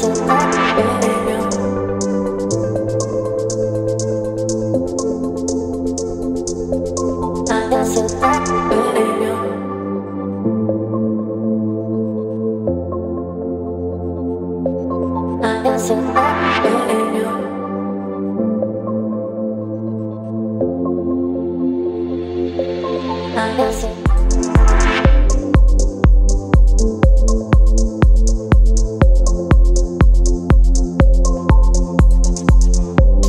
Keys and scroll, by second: 9.3 ctrl+b, 29.6 space.